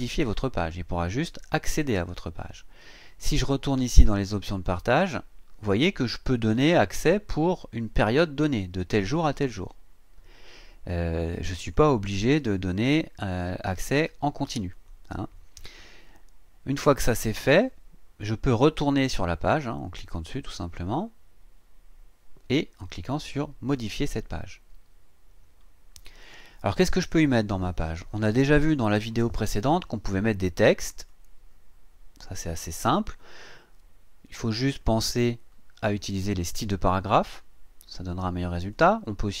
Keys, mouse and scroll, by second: 3.2 click, 4.5 click, 11.6 click, 14.7 click, 17.5 click, 20.3 click, 23.8 click, 31.1-32.5 drag, 34.8 click, 35.9 click, 38.7 click.